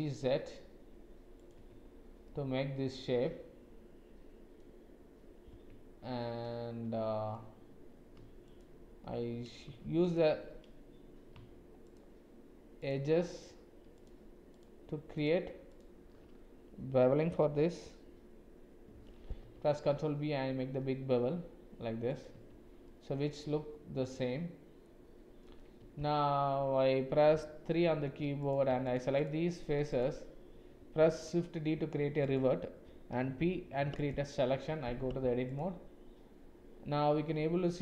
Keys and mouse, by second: 1.8 Tab, 2.3 click, 2.5-4.6 middle drag, 5.5 Tab, 6.2-7.3 middle drag, 8.4 alt+click, 10.0 alt+click, 11.9 alt+shift+click, 15.2 alt+shift+click, 19.4 ctrl+b, 22.5 Tab, 22.9 click, 25.8 Tab, 27.8 3, 28.4 click, 28.9 shift+click, 29.5 shift+click, 30.0 shift+click, 31.0 shift+d, 33.4 p, 34.9 Tab.